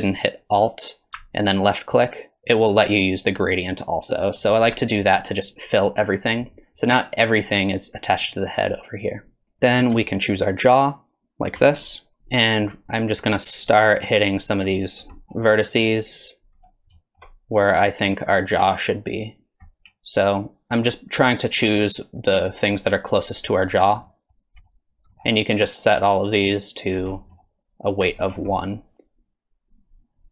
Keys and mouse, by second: 2.0-4.4 alt+drag, 9.4 t, 11.1 ctrl+click, 12.2 KP_3, 12.7 click, 13.8-15.0 drag, 15.6 click, 16.0 click, 16.4 click, 17.0 shift+click, 17.5-18.9 drag, 19.1 click, 24.1 middle click, 24.4 click, 24.6 middle click, 24.7 click, 25.1 middle click, 25.9-27.0 drag, 27.2 middle click, 27.7 click, 28.5 middle click, 28.9 KP_3, 29.1-30.2 drag.